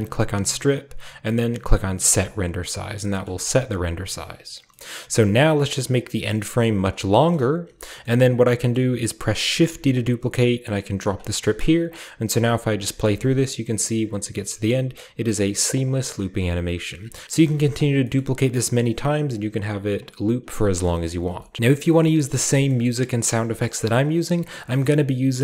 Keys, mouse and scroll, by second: 0.0-2.1 drag, 3.1-5.9 scroll down 1, 3.3-4.5 middle drag, 5.9-7.9 drag, 7.1-7.9 scroll up 1, 7.3 middle click, 7.9-9.5 scroll up 1, 8.1 middle click, 8.8-9.9 middle drag, 9.5-9.9 shift+scroll up 1, 9.6 shift+d, 11.1-11.9 drag, 11.4 space, 12.1-13.2 drag, 12.5 middle click, 12.5-15.2 scroll up 1, 15.8 click, 16.4 click, 17.0 scroll up 1, 17.2 shift+middle click, 17.2-18.0 scroll down 1, 17.5 shift+d, 17.7-18.1 shift+drag, 18.0-19.8 shift+scroll up 2, 21.1-21.6 ctrl+scroll up 2, 21.6-22.5 middle drag, 22.4-24.1 scroll down 3, 23.1-24.3 middle drag.